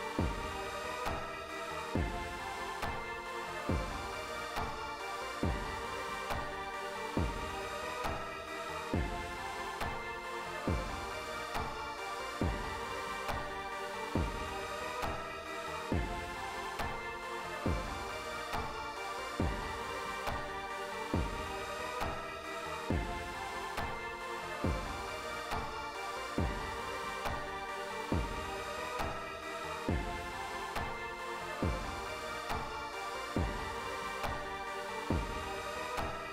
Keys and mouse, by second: 13.9 click, 22.4 right click, 29.0 click, 30.2-31.3 drag, 34.5 click.